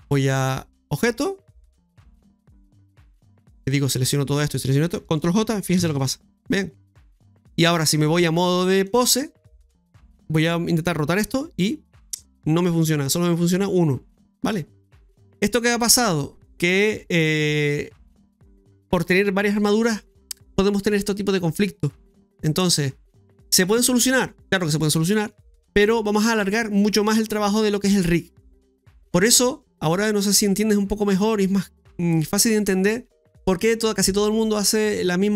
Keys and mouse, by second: 0.2 click, 2.6 click, 3.7 right click, 4.5 shift+right click, 5.5-6.2 typing, 8.0 click, 10.1 right click, 11.4 r, 12.6-13.5 typing, 12.9 right click, 14.8-15.6 typing.